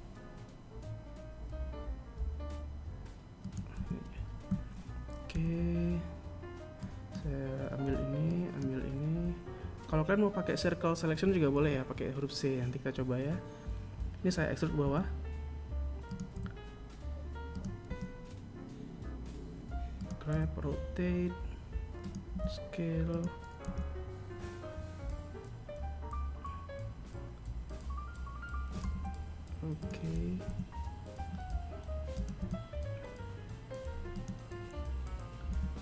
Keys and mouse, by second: 3.4 a, 5.0 b, 7.5 b, 14.5 e, 16.0 g, 17.5 r, 19.9 g, 23.2 r, 28.6 g, 30.1 e.